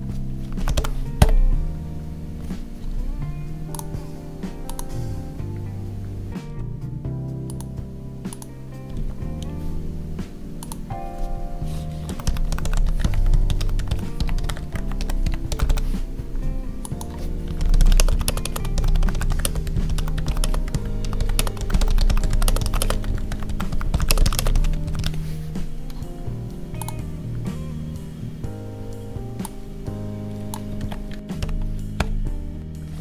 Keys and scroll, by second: 30.7 ctrl+c, 31.3 ctrl+v.